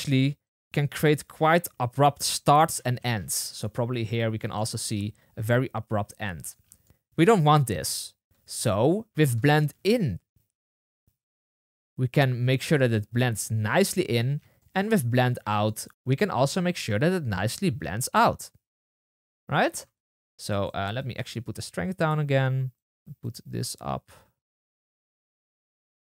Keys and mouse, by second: 0.9-2.5 drag, 2.5-3.7 middle drag, 3.7 click, 4.2 middle click, 4.5 click, 4.9-6.4 middle drag, 6.4-6.8 drag, 6.8-9.1 middle drag, 6.9 space, 9.4-15.6 shift+middle drag, 15.6-20.7 drag, 20.7 shift+middle click, 20.9-26.1 shift+drag.